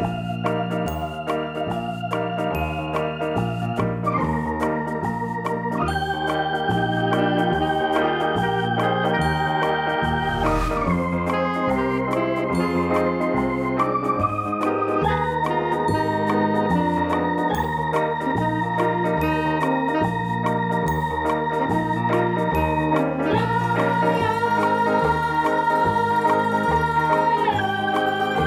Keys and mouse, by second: 0.4 ctrl+right click, 1.5 ctrl+click, 1.9 ctrl+click, 4.8 c, 5.8 click, 7.7 shift+Num_Lock, 8.1 shift+click, 9.1 right click, 10.8 click, 11.5 space, 12.2 click, 13.7 click, 15.0 click, 16.5 click, 17.6 space, 18.2 click, 18.3 space, 19.2 click, 19.8 space, 19.9 click, 20.1 space, 20.3 click, 22.4 space, 22.4 click, 23.6 click, 24.7 click, 25.8 click, 26.6 click, 26.9 space, 27.0 click, 27.0 space, 27.7 click.